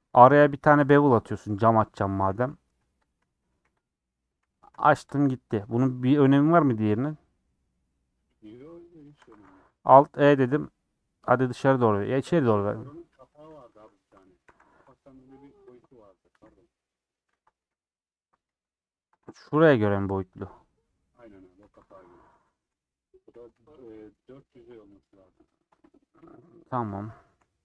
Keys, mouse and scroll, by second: 0.1 ctrl+b, 2.8 3, 3.1 click, 3.7 c, 5.1 x, 9.1 a, 9.7 alt+e, 13.8 a, 15.0 alt+n, 15.4 Tab, 15.7 Left, 16.4 /, 16.9-19.7 middle drag, 19.7 scroll up 2, 19.9 middle click, 20.8-21.9 ctrl+z, 22.1 ctrl+z, 22.2 ctrl+z, 22.7 ctrl+z, 23.3 ctrl+z, 23.8 ctrl+z, 26.0 KP_1, 26.4 scroll up 1, 27.2 shift+middle click, 27.5 scroll up 3.